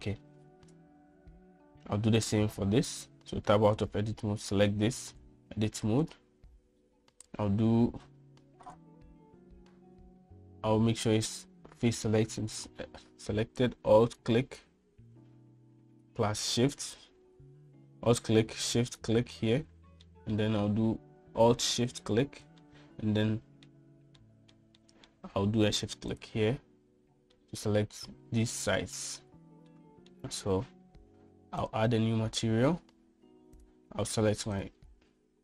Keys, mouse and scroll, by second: 4.2 Tab, 4.8 click, 6.2 Tab, 7.1 click, 12.0 click, 15.1 alt+click, 21.1 middle click, 23.7-24.7 middle drag, 25.3 shift+middle click, 25.9 shift+middle click, 28.5 middle click, 29.8 shift+middle click, 30.8 middle click, 32.7 click, 34.7-35.4 drag.